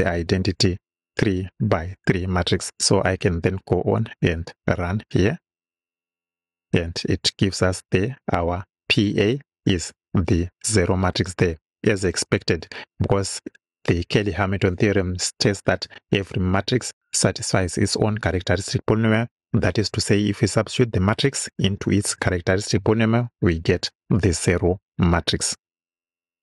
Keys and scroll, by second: 1.4 Right.